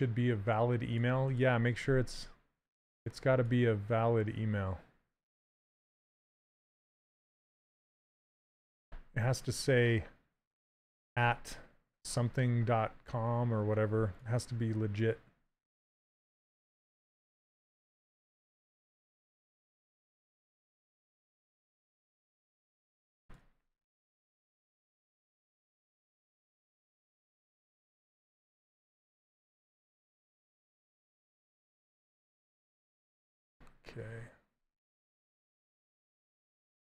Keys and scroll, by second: 28.7 w, 32.1 s.